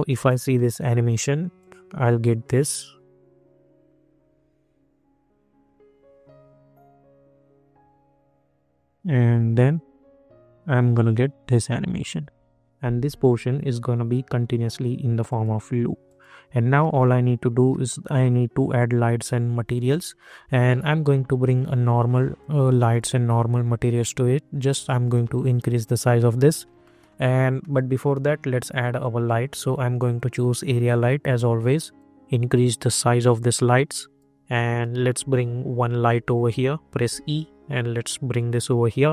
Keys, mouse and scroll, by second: 0.0-0.5 scroll down 1, 0.5 middle click, 1.5 click, 15.2 click, 16.8 middle click, 18.4 scroll down 1, 19.8-26.8 drag, 26.8 middle click, 29.0-34.6 drag, 34.6 middle click, 35.7 scroll up 1, 36.9 e, 37.7 click, 38.9 scroll down 1.